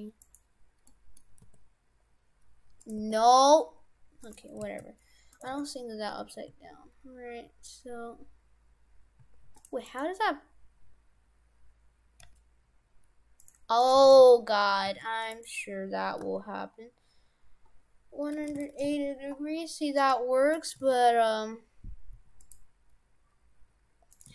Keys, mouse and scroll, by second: 0.9 middle click, 1.4 g, 3.0 r, 4.7 ctrl+z, 5.4 right click, 5.6 shift+f, 9.9 right click, 12.3 g, 13.8 right click, 14.0 shift+f, 15.5 right click, 16.2 r, 20.0 right click, 20.6 right click, 20.8 shift+f, 24.2 right click.